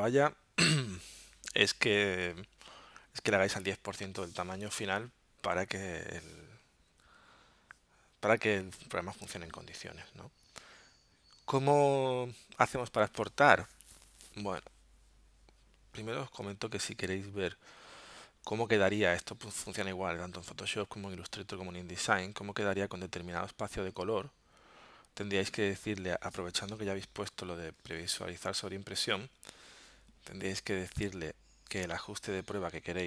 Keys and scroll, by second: 6.9 w, 12.8 w, 26.7 alt+super+0.